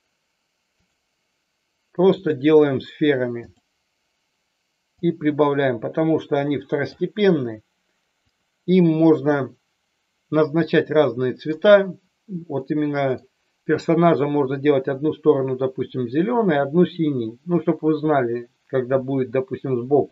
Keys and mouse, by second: 0.9-2.3 drag, 4.9-6.9 drag, 8.2 click, 10.6 middle click, 12.6 middle click, 19.1-20.1 middle drag.